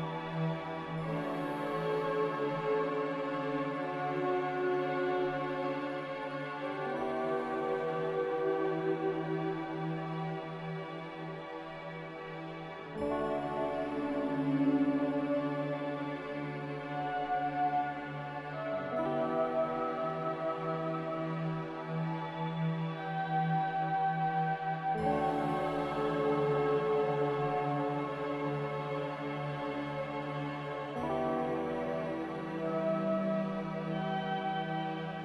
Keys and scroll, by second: 2.7-3.4 typing, 4.7-5.4 typing, 14.3-15.1 typing, 19.0 b.